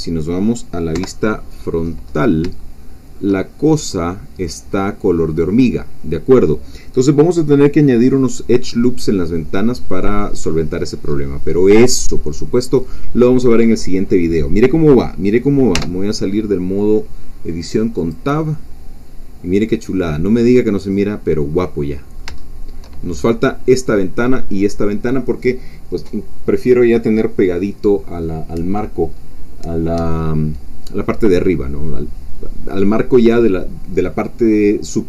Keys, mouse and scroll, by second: 0.9 KP_1, 1.8-2.5 scroll up 1, 2.6 shift+click, 3.5-4.0 shift+scroll up 4, 6.4-9.8 scroll down 2, 9.8-11.8 middle drag, 11.8-12.3 scroll down 2, 12.3 middle click, 13.1 scroll down 2, 13.8 middle click, 15.7 Tab, 17.2-17.9 scroll down 1, 18.0 click, 18.6-23.0 middle drag, 23.0-23.3 shift+scroll up 1, 23.3-28.2 middle drag.